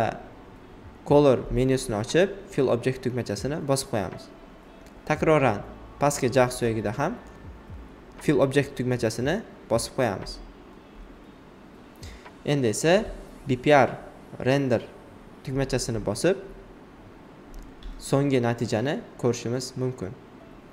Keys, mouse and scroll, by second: 0.8 click, 3.1 alt+right click, 4.1 alt+right click, 5.5-8.2 alt+right drag, 8.2-11.7 alt+right drag, 11.7-13.5 alt+right drag, 14.9-17.9 alt+right drag, 17.9 alt+right click, 19.5 click.